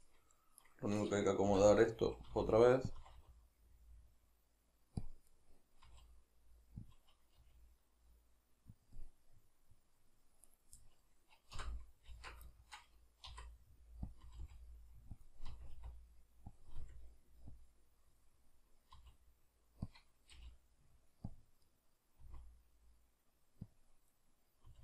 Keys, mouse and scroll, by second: 0.6 right click, 1.5 l, 2.9 click, 3.0 r, 5.1 click, 5.3-7.0 middle drag, 5.9 r, 7.0 click, 7.4 g, 8.9 click, 9.0-10.5 middle drag, 10.5 right click, 10.8-14.2 middle drag, 11.6 l, 12.1 alt+q, 13.3 r, 14.2 click, 14.3 r, 15.3 click, 15.5 r, 16.6 click, 16.9 r, 17.7 click, 18.3-20.0 middle drag, 19.0 r, 20.0 click, 20.4 g, 21.4 click, 21.7 middle click, 22.3 r, 23.8 click, 24.1-24.8 middle drag, 24.7 r.